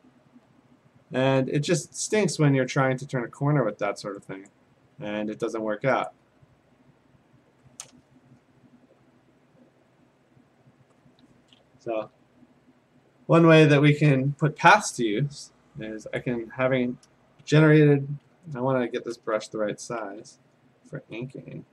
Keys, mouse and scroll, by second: 0.4 F5, 1.4 F5, 4.5 click, 6.1 click, 6.4 F5, 6.8 F5, 10.1 click, 11.9 ctrl+z, 13.7 click, 14.2 ctrl+z, 16.2 click, 18.2 b, 19.8 [, 20.0 [, 20.2-21.0 [.